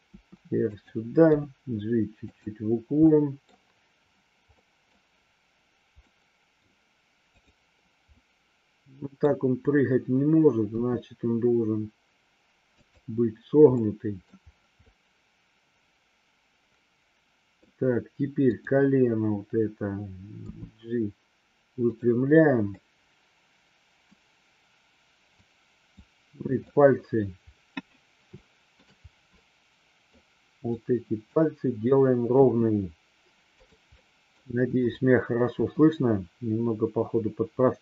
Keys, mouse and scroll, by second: 0.1 r, 0.6 click, 1.3 g, 2.3 click, 3.0-3.5 middle drag, 3.4 scroll down 1, 4.5 scroll up 1, 4.6 middle click, 6.0 scroll up 1, 6.1-6.5 middle drag, 7.4 drag, 8.1-9.3 middle drag, 10.6 r, 12.8 click, 13.8-14.3 middle drag, 14.8-17.6 middle drag, 18.5 click, 20.4 g, 21.8 click, 22.8-23.9 middle drag, 23.9 scroll down 1, 25.4-26.0 drag, 26.5-27.1 middle drag, 28.4 shift+middle click, 29.4 middle click, 30.6-31.3 drag, 32.3 r, 34.0 middle click, 34.8-35.5 drag, 35.6 r.